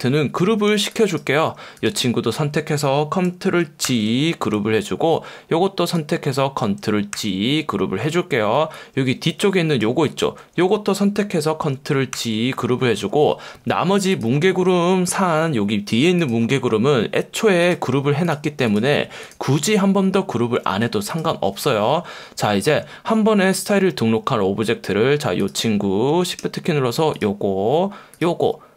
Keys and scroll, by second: 0.7 space, 3.9 super+g, 7.1 super+g, 10.1 super+z, 12.1 super+g.